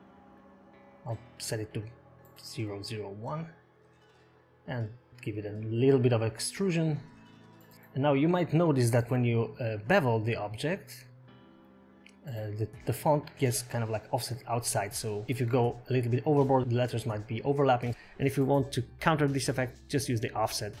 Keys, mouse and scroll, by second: 1.4 click, 5.5 middle click, 6.1 shift+middle click, 6.3-6.7 scroll up 4, 6.9 middle click, 7.7 click, 7.7 middle click, 7.7 scroll up 1, 7.7 KP_0, 8.8-9.3 scroll up 2, 10.8 scroll up 4, 12.7 click, 15.1 ctrl+x, 15.8 ctrl+z, 18.3 click.